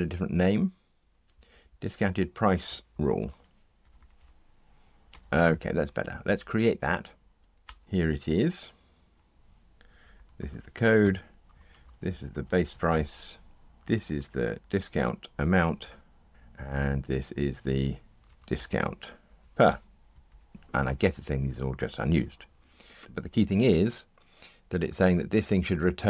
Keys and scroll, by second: 3.8 Delete, 5.7 alt+Return, 11.0 Tab, 15.8 Return, 16.3 Delete, 19.6 Return, 20.4 alt+shift+Right.